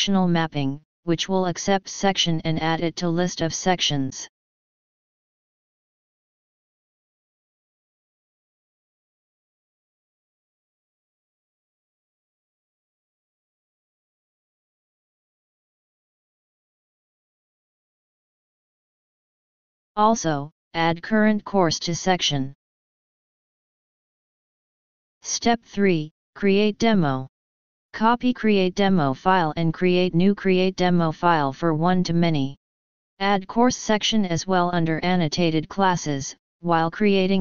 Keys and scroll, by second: 24.0 ctrl+shift+o, 24.5 ctrl+s, 35.7 ctrl+c.